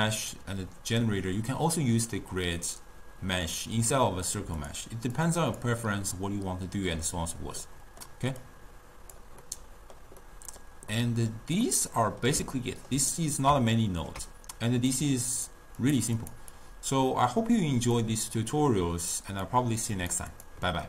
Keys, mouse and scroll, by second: 4.6 click, 5.2 click, 7.7-8.5 middle drag, 8.5 click, 9.5-15.0 middle drag, 15.0 click, 15.8 click, 16.3 click, 16.6-18.7 drag, 19.5 click, 20.4 click.